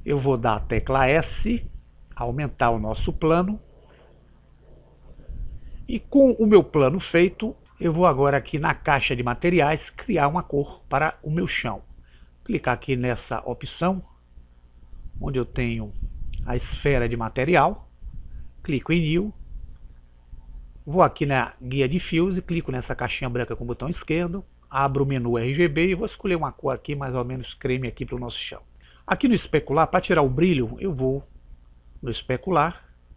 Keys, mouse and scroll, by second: 0.0 s, 13.4-17.0 drag, 18.8 click, 23.7 click.